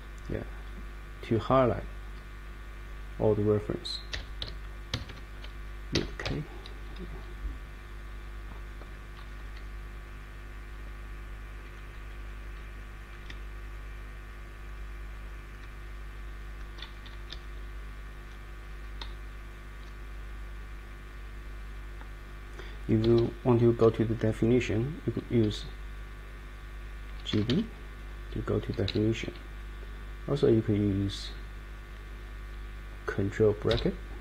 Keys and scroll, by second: 4.1 \, 4.9 Escape, 5.1 Escape, 5.9 \, 7.2-8.9 Down, 7.8 Down, 11.6 Down, 12.2 Down, 12.7 Down, 13.2 Up, 13.7 Up, 14.5 Up, 19.0 Right, 19.6 Right, 23.0 Escape, 27.0-28.0 typing, 28.8 ctrl+o, 33.7 ctrl+].